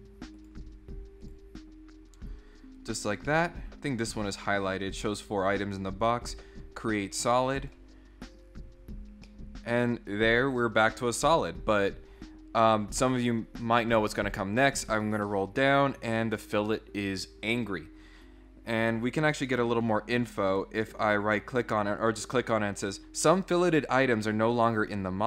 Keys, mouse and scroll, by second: 0.3 click, 1.2 click, 3.3 middle click, 6.2 click, 7.6 click, 9.2-10.5 middle drag, 14.7 click, 19.4 right click, 20.4 right click.